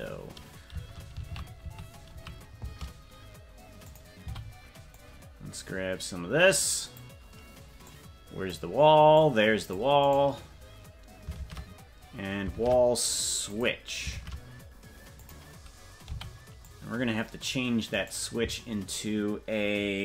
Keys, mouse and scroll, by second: 4.2 c, 11.4 shift+`, 14.2 shift+`, 16.0 c.